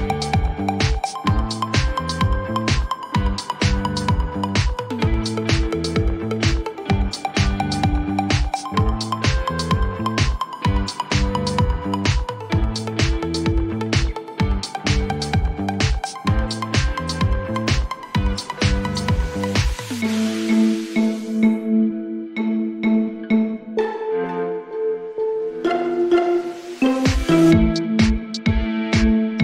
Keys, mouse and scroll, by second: 0.0-0.9 typing, 2.1 4, 3.2 b, 6.6 click, 9.0 click, 10.5 e, 11.6-14.0 typing, 16.6 click, 18.9 click, 20.2-22.5 typing, 23.7 Return, 26.6 click, 27.7 click, 28.7 click.